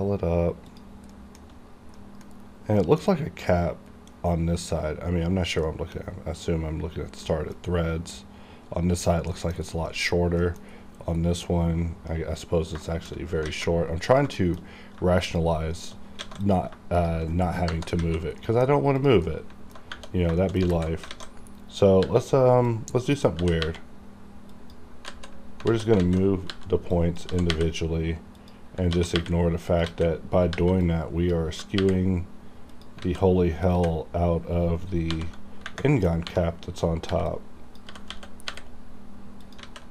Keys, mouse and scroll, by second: 0.7 shift+click, 1.1 shift+middle click, 2.0 middle click, 2.6 scroll up 1, 2.8 middle click, 2.8 middle click, 5.7 middle click, 5.8 middle click, 9.6 scroll down 1, 9.9 middle click, 10.1-10.7 scroll up 2, 10.4 middle click, 12.9 shift+middle click, 13.5 alt+a, 14.1 click, 14.1 click, 14.4 shift+middle click, 14.6-15.0 shift+scroll up 2, 15.2 shift+click, 16.2 alt+a, 16.4 click, 17.0 shift+click, 18.0 alt+a, 18.4 middle click, 18.7 scroll up 1, 19.0 click, 19.3 middle click, 19.8 alt+scroll up 2, 20.4 shift+middle click, 20.7 alt+z, 21.1 alt+a, 22.0 b, 22.7 click, 23.4 g, 24.5 click, 25.1 alt+z, 25.7 alt+z, 26.5 b, 26.9 click, 27.3 g, 28.4 click, 28.4 y, 28.4 click, 28.9 g, 29.7 click, 29.7 y, 29.7 click, 29.9 alt+a, 30.5 b, 30.8 click, 31.5 g, 32.7 y, 32.7 click, 33.0 alt+a, 33.8 b, 35.1 n, 36.2 n, 37.1 b, 37.3 click, 37.9 g, 38.1 x, 39.4 click, 39.6 alt+a.